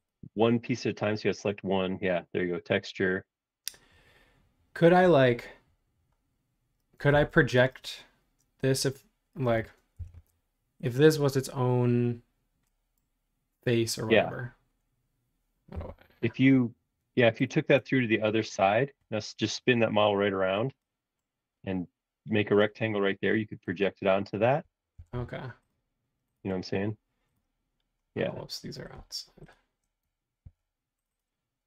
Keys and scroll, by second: 7.2 super+z, 9.9 l, 15.7 Right, 16.3 Left, 17.8 space, 24.9 l, 26.5 space, 30.4 super+x.